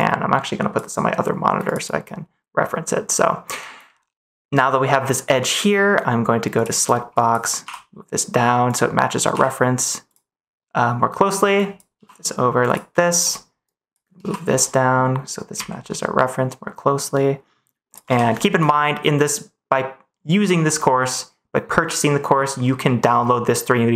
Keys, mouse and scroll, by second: 6.5 click, 7.1 click, 7.6 g, 8.6 click, 9.2 g, 10.0 click, 11.6 click, 11.9 g, 12.6 click, 13.7 click, 14.1 g, 14.4 x, 15.5 z, 17.8 click, 18.0 ctrl+s.